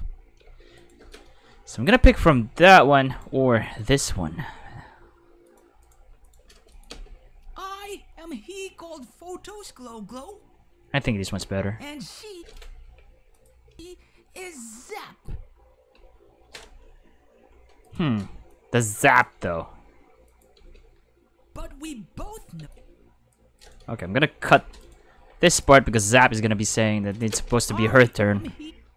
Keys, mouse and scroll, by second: 0.4 space, 0.8 right click, 3.1 right click, 3.3 g, 3.8 click, 4.0 right click, 4.1 g, 5.4 click, 5.8 right click, 6.0 g, 6.2 click, 6.7 click, 6.9 space, 10.9-13.7 typing, 13.3 click, 15.9 space, 18.5-19.2 drag, 20.3 click, 20.6 space, 22.6 space, 22.7 click, 23.6 right click, 24.6 k, 24.8 right click, 25.1 g, 25.5 click, 26.0 right click, 26.5 g, 27.1 click, 27.3 space, 28.6 space.